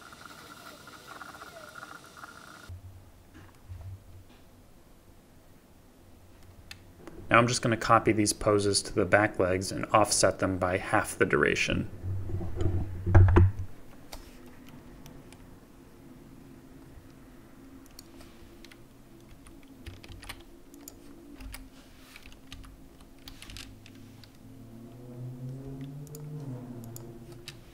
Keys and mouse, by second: 0.0 click, 0.4 click, 1.0-2.2 typing, 1.7 click, 2.3-2.6 drag, 15.0 shift+middle drag, 19.3 a, 20.1 ctrl+c, 21.4 i, 22.5 ctrl+v, 23.5 space.